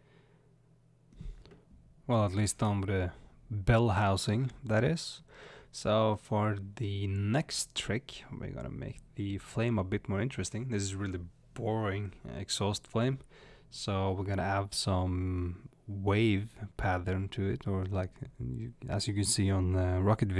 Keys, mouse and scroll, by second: 4.9 scroll down 1, 5.5-6.3 scroll up 1, 6.3 click, 6.3-11.7 middle drag, 8.9 space, 12.3 click, 16.8 click, 17.7 click, 18.6 click, 20.1 click.